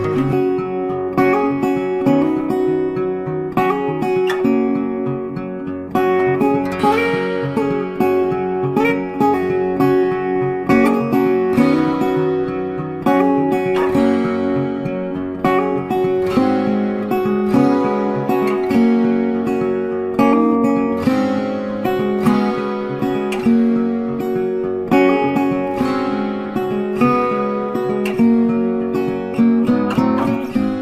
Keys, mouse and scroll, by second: 0.0 space, 0.1 double click, 0.3 ctrl+click, 5.4 space, 9.4 space, 16.5 ctrl+space, 16.6 ctrl+click, 16.7 ctrl+space, 17.3 ctrl+click, 20.1 typing, 20.9 Return, 23.7 Return, 26.0-26.4 scroll down 1, 26.4 scroll up 1, 28.6 right click, 30.0 space.